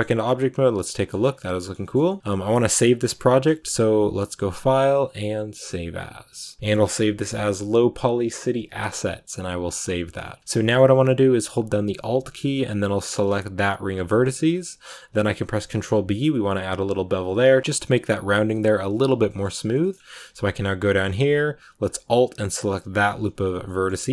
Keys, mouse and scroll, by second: 1.0 scroll up 1, 1.1 scroll down 2, 1.3 middle click, 1.7-2.7 scroll up 3, 2.7-6.6 middle drag, 9.4-10.4 drag, 10.4 scroll down 2, 10.5 shift+middle click, 10.7-13.0 scroll up 1, 13.0 alt+right click, 14.0 shift+middle click, 14.2-15.6 scroll up 2, 15.6 ctrl+b, 18.4-19.2 scroll up 2, 19.2-22.7 shift+middle drag, 22.7-24.1 alt+right drag.